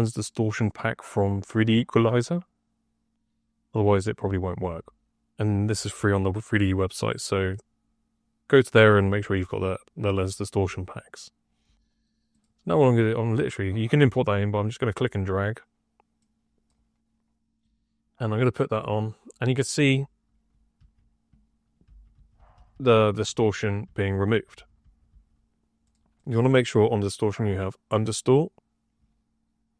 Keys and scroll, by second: 20.7-25.5 typing.